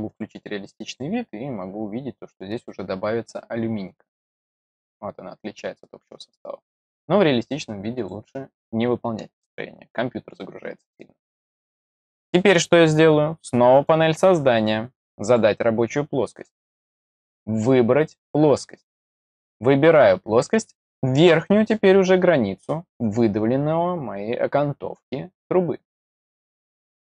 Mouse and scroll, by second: 0.0 click, 0.8 click, 6.6 click, 7.9 click, 13.7 click, 15.2 click, 17.9 click, 18.7 click, 26.8 click.